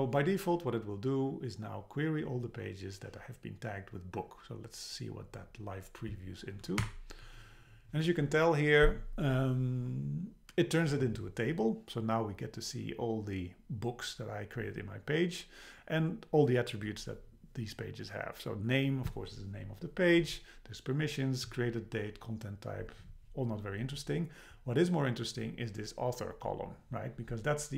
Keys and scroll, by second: 6.8 Up.